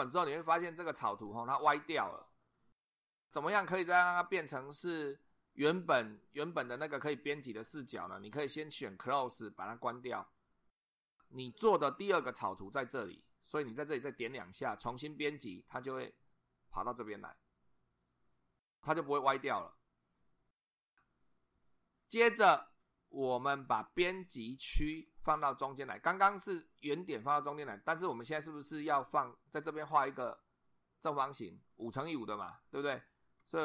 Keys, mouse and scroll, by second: 9.5 click, 14.9 click, 25.1-26.3 shift+middle drag.